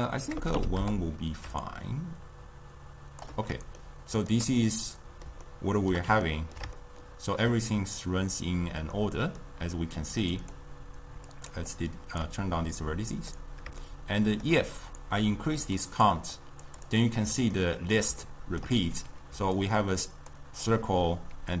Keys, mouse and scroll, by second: 0.5 BackSpace, 1.6-3.9 shift+drag, 3.9-10.4 shift+middle drag, 10.4-13.3 drag, 14.0-15.7 shift+middle drag, 15.7-17.6 drag, 17.6-19.4 ctrl+middle drag, 19.4-21.6 typing, 19.7 click.